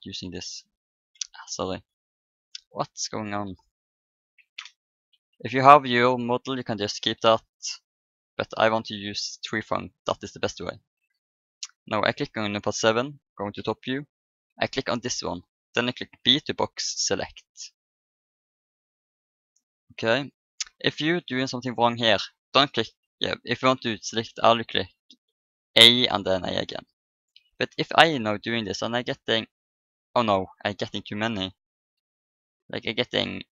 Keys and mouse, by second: 0.1 ctrl+z, 1.2 Tab, 2.4 Tab, 4.3 Delete, 8.5-10.0 drag, 10.0 Tab, 12.3 KP_7, 13.5 a, 15.6-17.1 drag, 16.2 b, 23.6 a, 24.4 a, 26.2 a, 27.6 b, 31.5 a, 32.0 b.